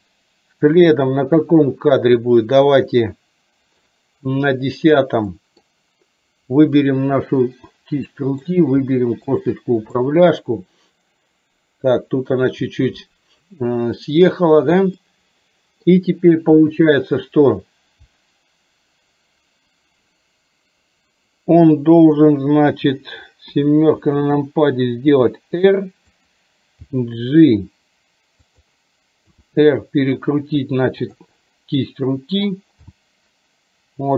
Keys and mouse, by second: 0.9-4.0 drag, 5.4 middle click, 8.1 middle click, 9.2 shift+click, 10.1-12.4 middle drag, 15.0 middle click, 21.7 middle click, 23.6 KP_7, 25.1 r, 26.9 g, 29.4 r, 32.9 g.